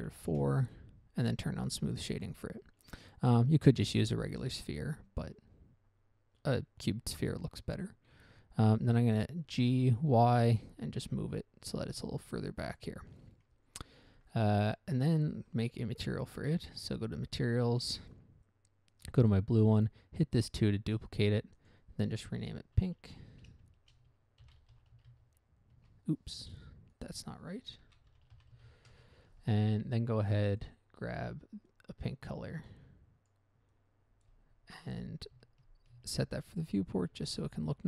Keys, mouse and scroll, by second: 0.6 Return, 0.6 4, 2.3 click, 2.9 scroll down 1, 3.3 middle click, 3.5 middle click, 3.9-4.2 scroll down 1, 4.2 middle click, 4.3-4.6 scroll up 1, 4.6 scroll down 1, 8.5 g, 10.3 y, 13.0 ctrl+click, 13.7 middle click, 14.1 middle click, 14.5 scroll up 1, 14.8 scroll down 1, 15.1 middle click, 15.4 middle click, 16.9 click, 18.1 click, 19.4 click, 20.8 click, 21.9 click, 23.1-25.4 typing, 26.1 Return, 27.3 click, 28.4-29.7 typing, 30.9 click, 32.0 click, 33.6 click, 34.1 click, 34.6 click, 36.3 ctrl+c, 37.5 ctrl+v.